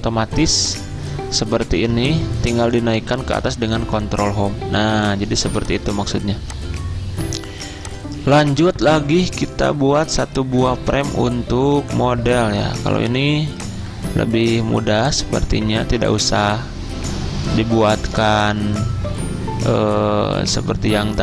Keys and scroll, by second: 0.2 z, 3.5 ctrl+Home.